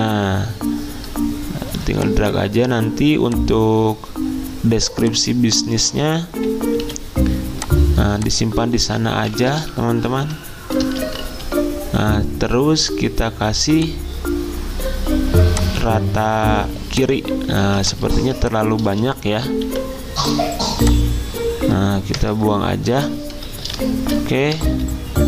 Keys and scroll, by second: 6.8 d, 9.5 Escape, 11.0 /, 17.6 z, 19.7 t, 22.2 BackSpace, 24.6 BackSpace.